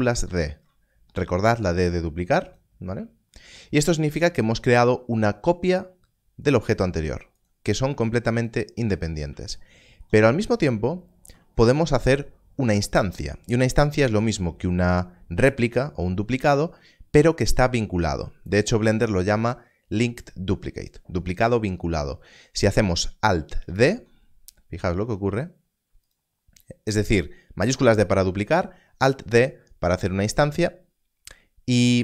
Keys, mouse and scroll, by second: 0.2 shift+d, 2.5 click, 10.2 scroll down 1, 23.7 alt+d, 26.0 alt+d, 26.1 click.